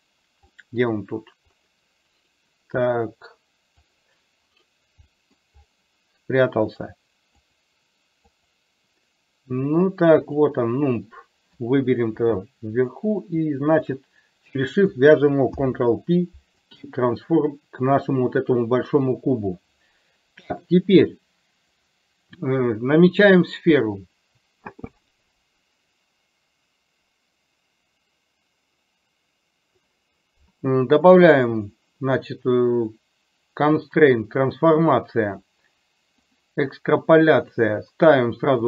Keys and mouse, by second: 0.7-1.1 middle drag, 3.8 click, 5.2 middle click, 7.4 click, 8.3 click, 12.2 KP_3, 13.8 shift+click, 15.5 ctrl+p, 21.9 click, 31.4-33.9 drag, 36.3 click, 37.4-38.6 drag.